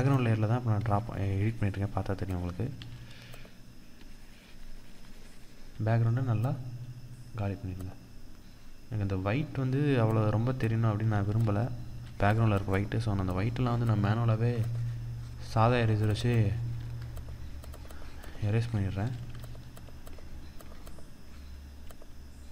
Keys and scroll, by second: 18.7 ctrl+=, 20.8 ctrl+=.